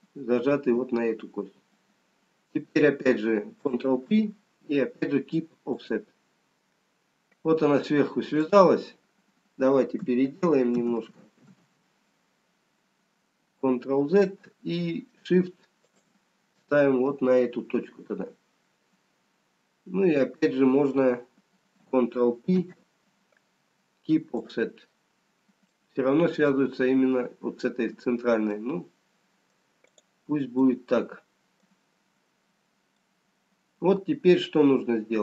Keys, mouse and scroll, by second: 1.6-2.1 scroll down 3, 5.4 ctrl+p, 8.8 click, 10.3 ctrl+z, 11.2 ctrl+z, 11.8 ctrl+z, 12.8-14.3 scroll up 1, 14.3-15.5 scroll up 1, 15.9 shift+click, 17.8 scroll down 1, 23.0 ctrl+p, 25.7 middle click, 28.4-29.8 scroll down 4, 29.8 middle click, 29.8 scroll up 1, 31.3 middle click, 31.3 click, 33.2 middle click, 33.2-34.7 scroll down 3.